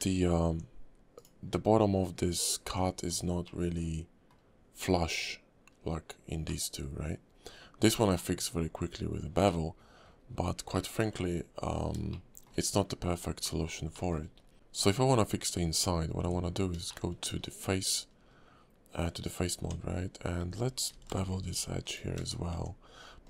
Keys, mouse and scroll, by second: 0.0 scroll up 2, 0.4 Tab, 1.1 click, 2.6 Tab, 3.1-3.4 scroll down 2, 3.4 middle click, 8.1 middle click, 9.4 middle click, 10.2 scroll up 2, 10.7 shift+middle click, 11.1-11.7 scroll down 3, 11.7 scroll up 2, 12.1 shift+middle click, 13.4 middle click, 13.9 shift+middle click, 14.2-15.2 scroll up 6, 15.2 scroll down 3, 15.8 scroll up 1, 16.2 Tab, 16.4-16.8 scroll up 1, 16.9 shift+middle click, 17.3 scroll down 2, 18.0-18.4 scroll up 3, 19.6 Tab, 20.9 ctrl+b, 22.3 scroll down 2, 22.5 Tab, 22.9 scroll up 2, 23.2 click.